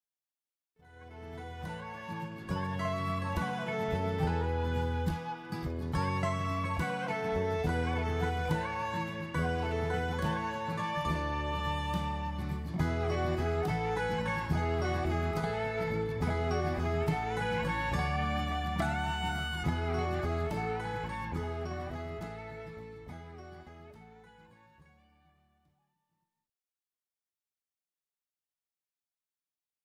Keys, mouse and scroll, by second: 0.9 click, 1.3-1.6 scroll up 2, 1.6 middle click, 2.7-3.9 scroll down 2, 4.5 Tab, 5.3 scroll up 1, 5.4 middle click, 12.3 click, 15.5-15.9 scroll up 2, 15.9 middle click, 20.0-20.6 scroll down 3, 20.4 scroll up 1, 20.6 middle click, 23.9 middle click, 28.2 middle click.